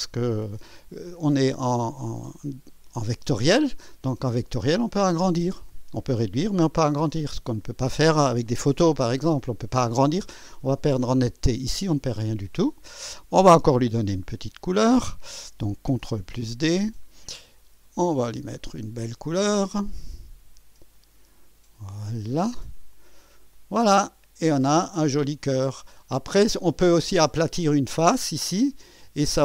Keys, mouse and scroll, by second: 12.1 scroll down 1, 12.6 scroll up 1, 16.0 ctrl+d, 16.6 ctrl+click, 17.8 click, 19.8 click, 20.9 click, 22.3 click, 22.9 click, 23.5-26.8 drag.